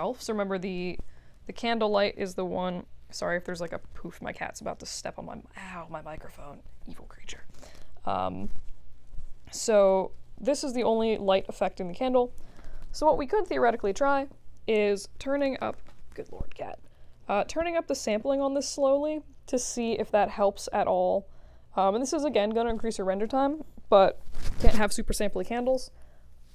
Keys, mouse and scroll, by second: 14.7 click, 16.8 2, 18.8 click.